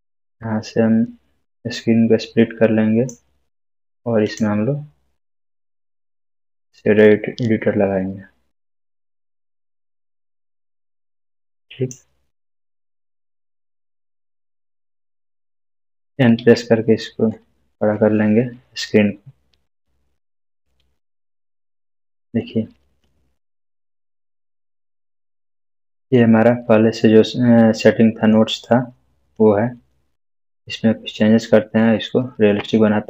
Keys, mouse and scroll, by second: 6.6 click, 7.9-9.6 scroll up 1, 10.4-12.0 drag, 16.4 click, 17.3-19.8 scroll up 1, 20.9-22.2 middle drag, 22.4-23.2 scroll up 1, 23.2-24.5 middle click, 27.1-28.0 scroll down 1, 28.0-28.6 middle click, 29.3-30.6 drag, 31.1-31.8 scroll up 1.